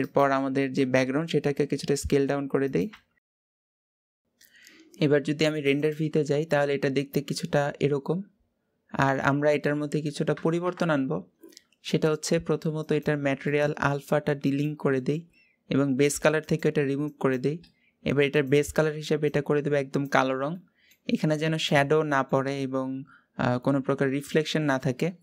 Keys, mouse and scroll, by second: 0.0 click, 0.7 s, 4.3 click, 5.5 click, 6.4-6.9 scroll down 2, 6.9-7.3 scroll up 2, 7.3-10.4 middle drag, 10.4 KP_0, 14.2 drag, 14.7-16.3 middle drag, 16.3-19.0 drag.